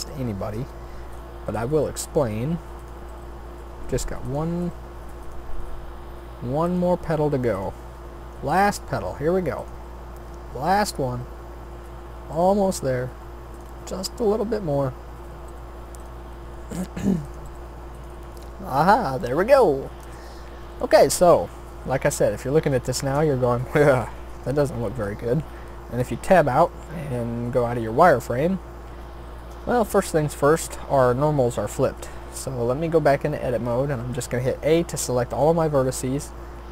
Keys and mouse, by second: 1.4 shift+d, 3.1 r, 4.6 g, 5.5 e, 6.8 s, 7.7 e, 8.7 s, 9.7 e, 11.2 s, 12.5 e, 15.5 g, 16.3 s, 17.4 g, 20.1 a, 26.4 Tab, 27.6 z, 28.6 middle click, 31.8 Tab, 33.7 a.